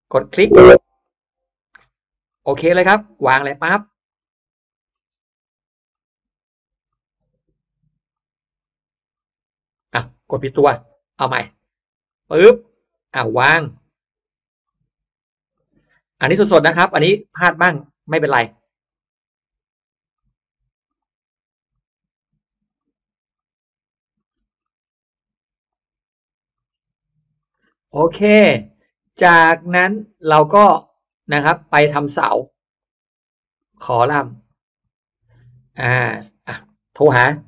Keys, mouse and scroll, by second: 0.0 click, 0.9 click, 2.2 click, 3.3 drag, 4.1-4.5 scroll up 1, 4.1 middle click, 4.9 scroll up 1, 5.8 click, 6.8 click, 8.0 click, 9.7 click, 10.6 click, 11.9 click, 13.3 click, 14.5 drag, 15.4 click, 16.7 drag, 17.6 drag, 18.6 click, 18.9 scroll down 1, 19.3 scroll up 1, 20.0 drag, 20.7 click, 21.6 click, 22.5 drag, 23.3 drag, 24.1 click, 24.5 scroll down 1, 24.5 middle click, 25.6 drag, 26.4 click, 27.3 click, 27.5 middle click, 27.8-28.3 scroll down 2, 28.1 middle click, 28.3 scroll, 28.3-28.7 scroll down 1, 30.2 click, 30.7 middle click, 31.3 scroll, 32.3 click, 33.5 click, 34.3 click, 34.9 click, 36.0 click.